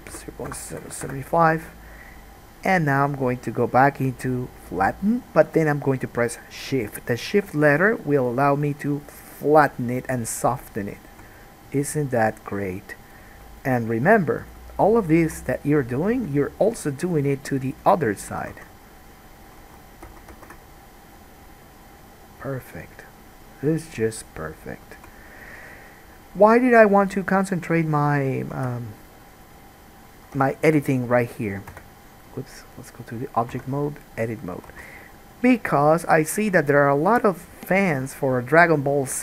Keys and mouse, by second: 18.7 ctrl+z, 19.8 ctrl+z, 20.2 ctrl+z, 20.5 ctrl+z, 28.7 Tab, 30.6 ctrl+z, 32.2 Tab, 33.7 Tab, 35.0 alt+a, 37.3-39.2 middle drag, 38.2 KP_Decimal.